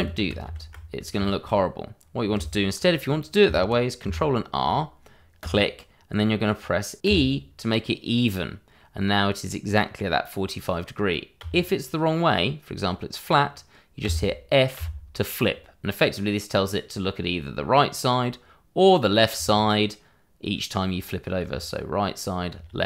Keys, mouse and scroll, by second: 0.9 scroll down 1, 1.2 shift+middle click, 3.1-3.4 scroll up 1, 6.0 click, 7.0 e, 11.4 f, 14.0 f, 19.3 f.